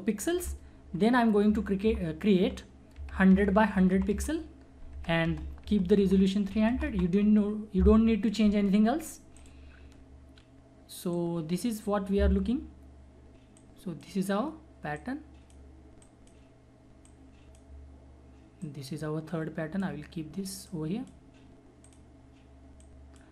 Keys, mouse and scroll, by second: 1.5 alt+1, 1.8 alt+0, 3.0 alt+Tab, 3.7 alt+1, 3.9 alt+0, 4.9 alt+Tab, 6.5 alt+3, 6.7 alt+0, 9.3-18.6 alt+drag, 11.4 alt+click, 17.4 alt+click, 18.9-20.4 alt+drag, 20.9 alt+click.